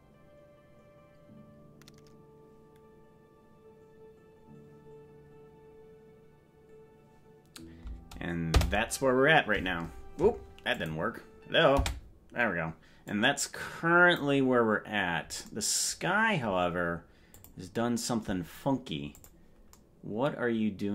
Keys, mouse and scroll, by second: 8.6 space, 11.9 space, 13.1-14.5 drag, 17.4 click, 19.2 click.